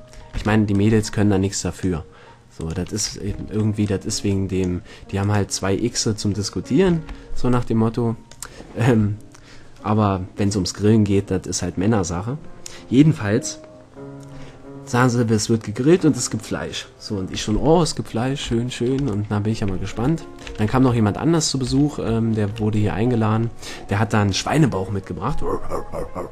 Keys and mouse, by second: 0.5 ctrl+l, 3.6 ctrl+l, 5.9 click, 7.1 ctrl+l, 7.7-9.4 drag, 18.2 middle click, 19.7 middle click, 19.8 a, 20.9 Tab, 21.4-21.7 middle drag, 21.8 a.